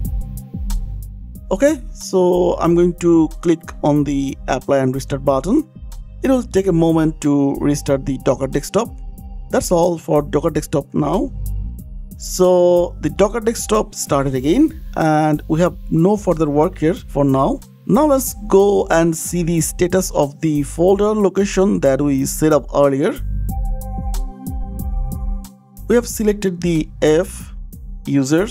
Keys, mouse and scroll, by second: 2.1 click, 4.2 click, 5.6 click, 7.5 scroll down 4, 8.4 click, 9.4-10.7 scroll down 3, 11.1 click, 12.1 click, 17.1 click, 18.8 click, 19.8 click, 22.9 click, 23.8 click, 24.2 ctrl+v, 25.6-26.2 scroll down 8, 27.0 click, 27.0 scroll, 27.6-28.5 scroll, 27.8 click, 28.3 u, 28.4 u.